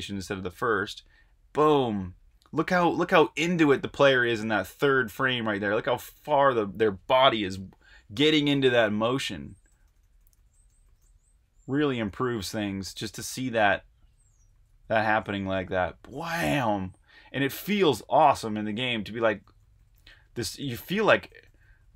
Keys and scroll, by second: 0.9 Right, 1.3-2.1 typing, 3.4-4.1 typing, 8.2 Right, 8.3-14.8 typing, 20.2-21.9 typing.